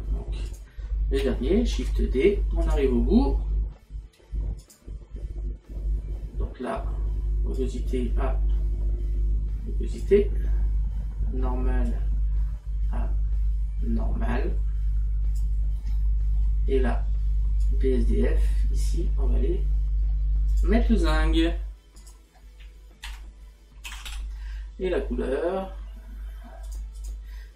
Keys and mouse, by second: 0.5 click, 4.6 click, 11.9 click, 20.6 click, 26.7 click.